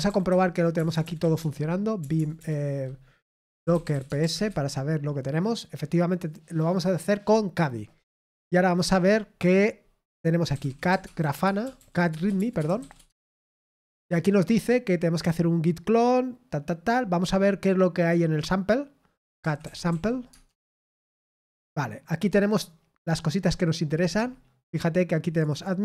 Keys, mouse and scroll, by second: 4.2 typing, 13.0-13.4 typing, 20.9 typing, 25.3 click.